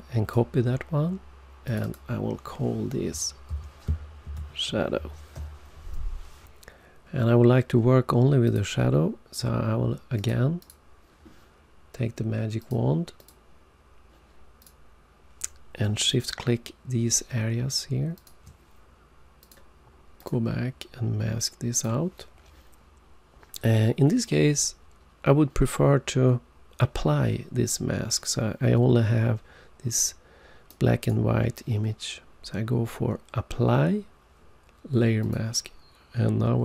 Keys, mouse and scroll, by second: 1.6 click, 1.9 double click, 5.3 typing, 8.4 click, 10.1 click, 10.5 click, 12.5 click, 13.1 click, 14.5 click, 15.9 shift+click, 18.1 shift+click, 19.3 click, 20.1 click, 21.6 click, 30.6 right click, 35.1 click.